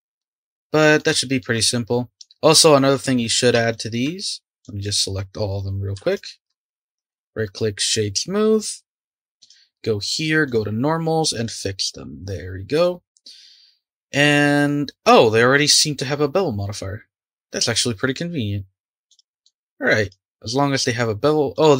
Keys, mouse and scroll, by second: 0.2-1.5 middle drag, 1.5 click, 1.9-2.4 middle drag, 2.4-2.9 scroll up 2, 2.9 click, 3.7 shift+click, 4.2-4.6 scroll down 3, 4.6 click, 6.1 shift+click, 6.7 shift+click, 6.9-8.3 right drag, 8.3-9.4 scroll up 1, 9.4 click, 10.4-11.3 drag, 11.3-12.7 right drag, 12.7 click, 19.1 click, 19.1-20.0 middle drag, 20.0 click.